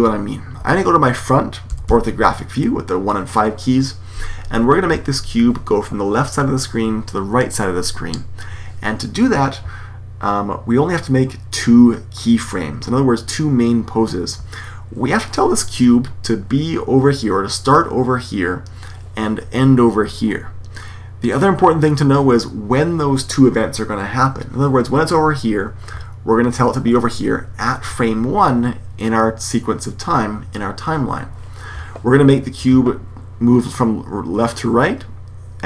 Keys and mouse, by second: 1.6 KP_1, 1.8 KP_5.